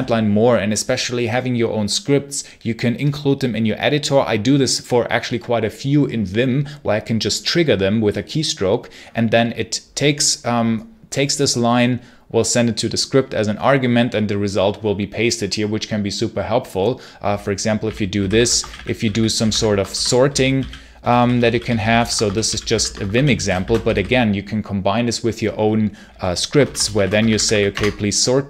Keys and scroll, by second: 17.5-24.2 typing, 26.2-27.9 typing.